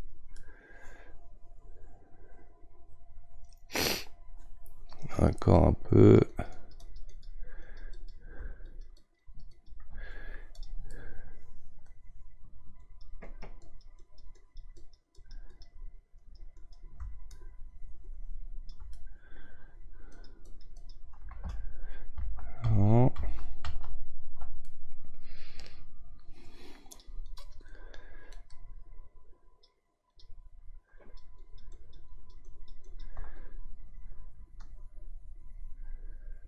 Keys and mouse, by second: 0.3-3.4 middle drag, 6.0-11.0 drag, 11.0-12.8 middle drag, 12.8-18.9 drag, 18.9-20.1 middle drag, 20.1-22.2 drag, 22.2 ctrl+z, 22.6 ctrl+z, 23.7 ctrl+z, 24.6-27.0 middle drag, 27.0-29.2 drag, 29.2-31.0 right drag, 31.0-36.4 drag.